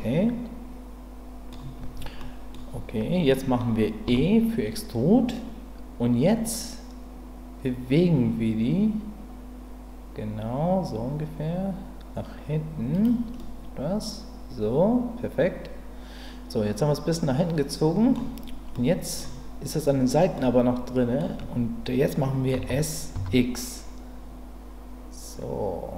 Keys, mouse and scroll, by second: 2.2 middle click, 4.1 e, 12.9 click, 13.4-18.1 middle drag, 18.8 middle click, 20.3 middle click, 22.5 s, 23.1 x.